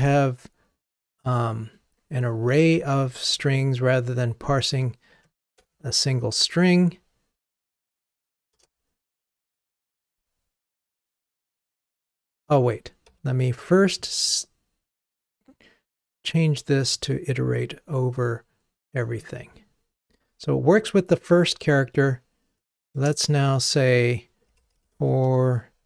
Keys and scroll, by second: 12.3 super+z.